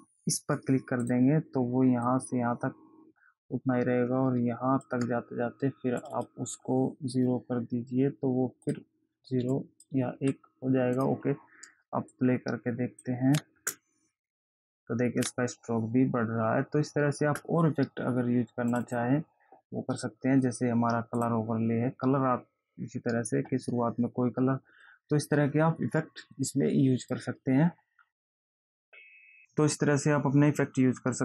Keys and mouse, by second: 1.4 click, 2.4 click, 6.4 click, 9.0 click, 11.3 click, 12.5 click, 13.9 space, 17.6 space, 19.1 click, 21.5 click, 27.4 click.